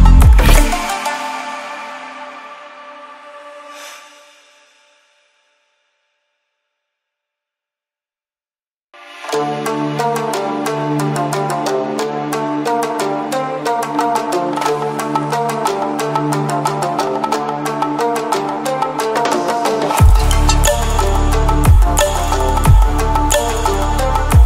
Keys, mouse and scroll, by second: 2.0 ctrl+alt+scroll up 1, 3.2-4.1 drag, 5.2 shift+click, 6.1-7.3 drag, 7.5 right click, 8.2-10.8 drag, 22.4 ctrl+alt+scroll down 1, 23.9 ctrl+alt+scroll up 1.